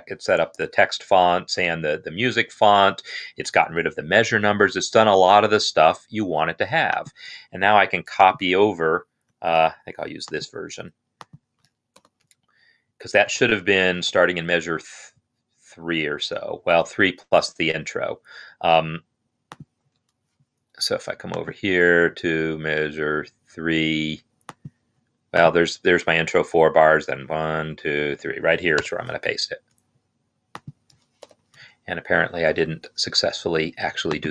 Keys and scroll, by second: 11.9 ctrl+c, 27.0 Right, 28.6 Right, 28.6 ctrl+v, 31.0 ctrl+v.